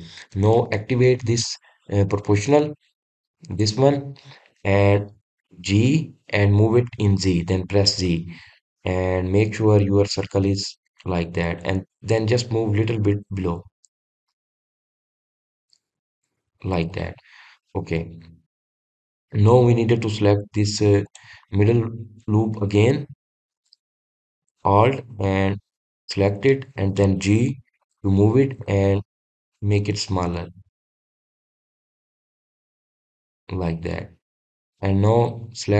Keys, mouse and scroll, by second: 1.3-2.5 middle drag, 2.5-3.0 scroll down 2, 3.0-3.6 scroll up 1, 4.4 click, 17.8 click, 18.7-19.1 scroll up 1, 19.1-19.6 scroll down 1, 21.9 click, 23.5-26.7 middle drag, 26.8 alt+click, 27.3-28.7 middle drag, 28.7 g, 34.5 click.